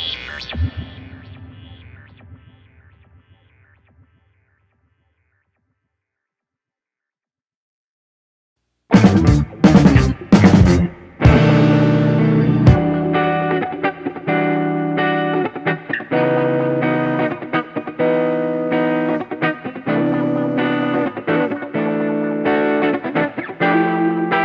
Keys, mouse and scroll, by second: 0.2 Tab, 1.9 click, 2.5 click, 2.8 ., 3.8-4.8 drag, 5.9 Tab, 6.3 click, 8.1 ctrl+z, 8.8 click, 9.4 Tab, 10.0 shift+s, 11.6 Tab, 12.2 click, 14.9 middle click, 15.5 ctrl+z, 16.5 Tab, 16.7-17.1 scroll up 2, 17.1 click, 17.3-17.9 scroll up 2, 17.6 alt+/, 17.9 click, 19.6-20.6 drag, 21.3 click, 22.0 KP_7, 22.3 scroll down 3, 22.5 shift+middle click, 23.2 ctrl+s, 23.8 Tab.